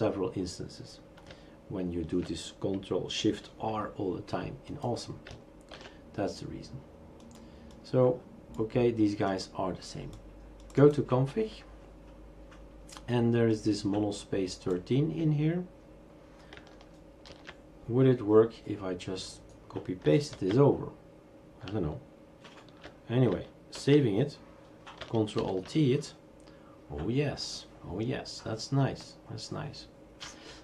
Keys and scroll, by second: 5.8 shift+super+q, 17.3 ctrl+v, 20.3 ctrl+s, 23.8 ctrl+s, 25.4 ctrl+alt+t.